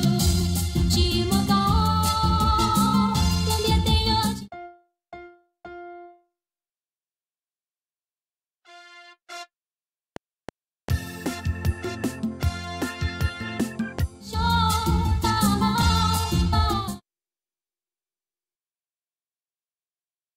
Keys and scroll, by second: 4.1 space, 10.0 F7, 14.0 space, 14.7 Right, 15.5 Left, 16.7 space, 19.2 ctrl+Right.